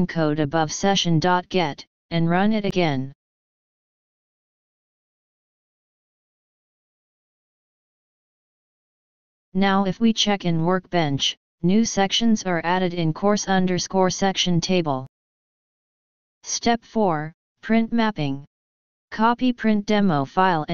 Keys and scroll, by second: 2.3 ctrl+v, 2.9 ctrl+d, 3.1 ctrl+d, 5.4 ctrl+s.